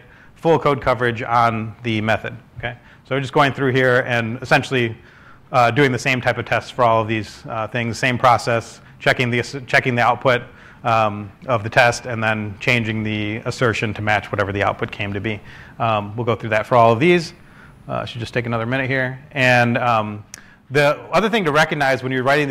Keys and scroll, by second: 0.7-1.1 typing, 6.0 typing.